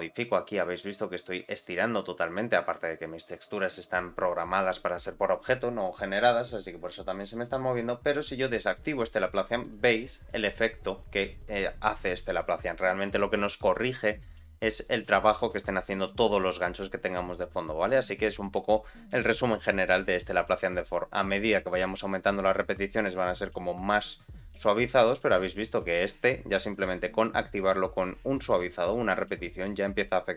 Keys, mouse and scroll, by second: 0.5 click, 0.9 g, 3.5 click, 4.9-6.0 scroll up 2, 6.0-6.6 scroll up 1, 8.7 click, 9.6 click, 10.2 click, 10.8 click, 11.8 click, 12.4 click, 14.1 click, 14.8 click, 16.4 click, 17.1 click, 21.7 click, 22.0 click, 22.4 click, 22.8 click, 25.1 click, 25.7 click, 26.1 click, 26.6 click, 28.6 click, 29.1 click, 30.0 click.